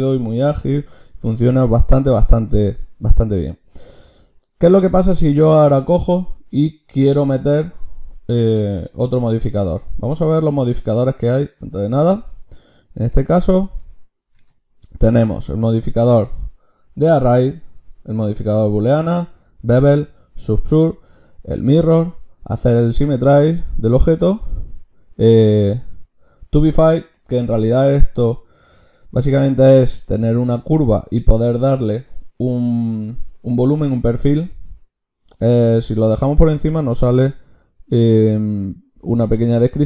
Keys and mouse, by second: 13.2-15.5 drag, 14.4 ctrl+shift+q.